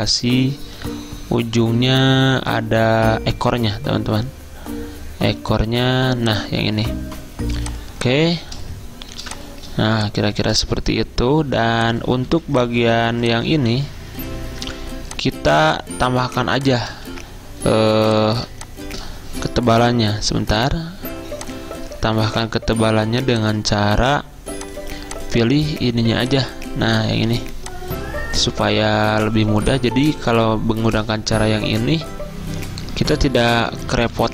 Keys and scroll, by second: 9.3 v, 12.3 z, 14.7 v, 17.1 ctrl+z, 18.1 z, 20.4 =, 22.5 -, 33.2 Up, 33.6 Up, 33.8 Up, 34.0 Up.